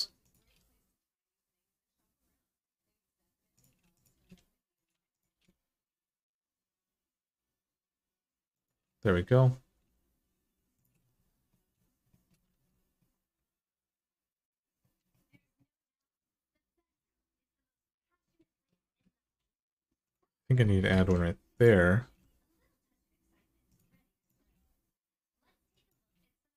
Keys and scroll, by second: 0.2 g, 4.0 g, 5.1 g, 9.5 g, 12.3 alt+z, 20.7 ctrl+r, 20.7 alt+z, 21.8 g, 24.2 g.